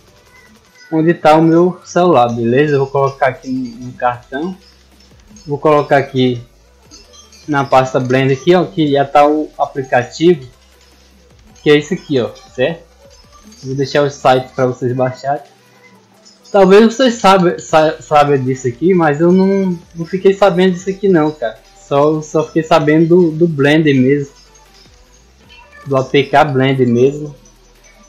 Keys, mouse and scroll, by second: 0.9 click, 1.9 click, 2.0 click, 3.1 click, 3.3 click, 5.4 click, 5.6 click, 6.9 click, 7.6 click, 8.7-9.8 drag, 11.1 click, 12.1 click, 13.2 right click, 14.2 click, 16.1 click, 17.2 click, 18.3 click, 20.2 click, 20.6 right click, 21.0 right click, 21.2 right click, 21.7 right click, 22.3 click, 23.7 click, 24.7 click, 25.5 click, 26.1 click, 27.8 click.